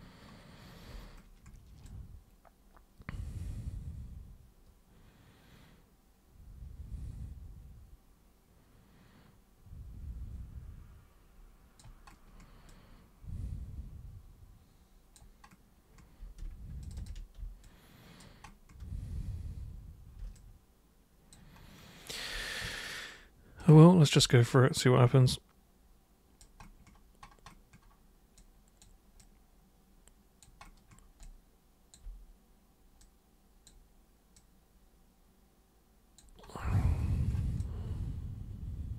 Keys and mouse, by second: 1.8-11.8 alt+super+drag, 12.7-15.1 alt+super+drag, 16.8 ctrl+shift+super+click, 17.6 alt+super+click, 20.3 alt+super+click, 23.6 super+click, 24.4-26.4 alt+super+drag, 28.4 alt+super+click, 29.2-30.4 alt+super+drag, 31.2 alt+super+click, 33.0 super+click, 34.4-36.1 super+drag, 37.6-38.9 alt+super+drag.